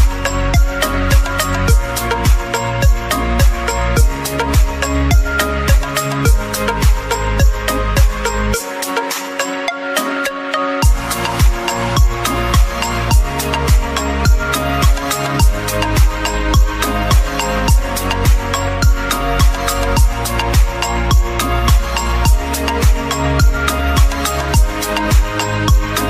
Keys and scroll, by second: 23.1 ctrl+t.